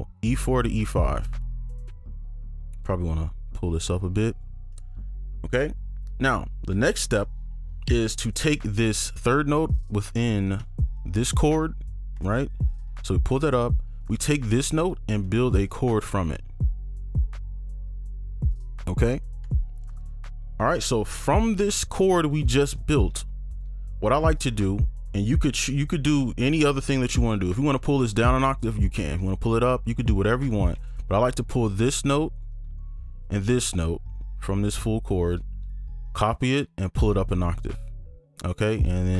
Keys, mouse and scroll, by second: 0.9 ctrl+Up, 1.9 right click, 4.7 right click, 9.0 ctrl+click, 10.1 ctrl+click, 10.6 ctrl+Down, 10.6 right click, 11.3 ctrl+click, 13.5 right click, 14.0 ctrl+click, 15.2 shift+click, 16.3 shift+click, 19.4 right click, 21.3 ctrl+click, 26.4 right click, 27.2 ctrl+click, 28.7 ctrl+Up, 29.2-29.6 ctrl+scroll up 2, 29.7 ctrl+Down, 30.4 right click, 31.5 ctrl+click, 33.2 ctrl+shift+click, 35.9 shift+click, 36.9 ctrl+Up, 38.0-39.1 scroll up 1.